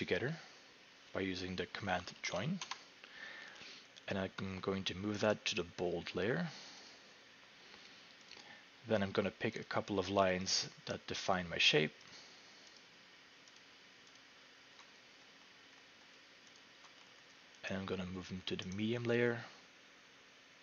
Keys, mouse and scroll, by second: 1.6-3.6 typing, 5.3 right click, 6.9 click, 8.3 click, 9.6 click, 10.5 shift+click, 11.3 shift+click, 12.1 click, 12.8 click, 13.6 shift+click, 14.2 shift+click, 15.2-16.6 scroll, 16.6 shift+click, 17.1-18.4 scroll, 18.7 right click.